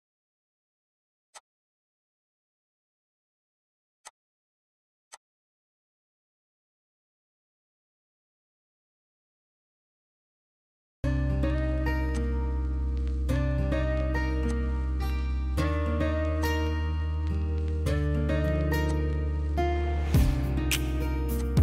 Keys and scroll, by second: 0.4 m, 6.1-8.7 typing, 17.7 m.